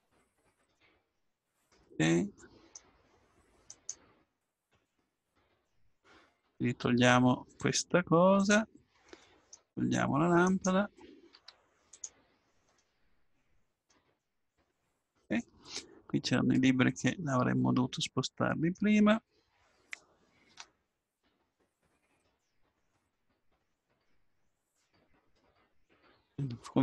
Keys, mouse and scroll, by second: 1.7-3.7 middle drag, 3.7 right click, 4.7 x, 6.4-8.3 right drag, 6.8 x, 9.3 middle click, 10.5 right click, 11.1 click, 11.3 x, 13.2 x, 14.5-16.4 middle drag, 17.1 middle click, 22.2 right click.